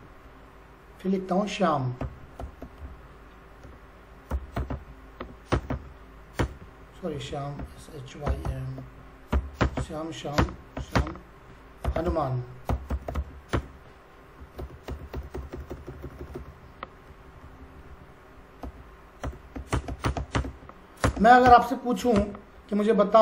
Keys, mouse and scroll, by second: 1.7-5.7 typing, 5.5 Return, 6.4 Return, 7.1 Up, 7.6-16.4 typing, 9.6 Return, 10.4 Return, 11.0 Return, 14.6 Return, 14.8 Return, 15.1 Return, 15.4 Return, 15.7 Return, 17.1 Up, 18.4 Down, 18.6-22.1 typing, 19.3 Return, 19.7 Return, 20.1 Return, 20.4 Return, 21.4 Return, 22.2 Return.